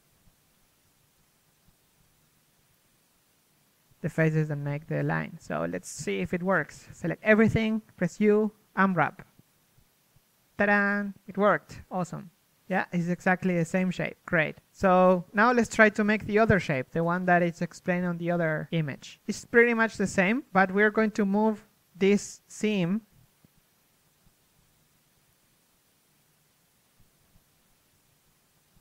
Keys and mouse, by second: 4.5 a, 5.1 z, 5.4 a, 10.1 u, 11.3 a, 13.3 z, 13.3 r, 19.2-21.8 middle drag, 22.0 ctrl+Tab, 22.6-26.7 right drag, 22.6 z, 23.6 z, 26.7 ctrl+e, 27.1 a, 27.4-28.8 middle drag.